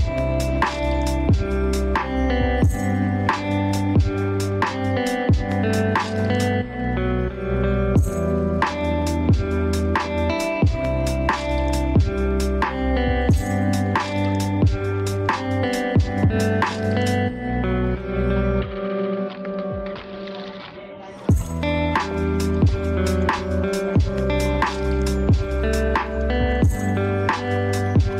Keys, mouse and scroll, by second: 1.5-4.1 drag, 7.1 click, 13.6 click, 18.7 click, 25.6 click.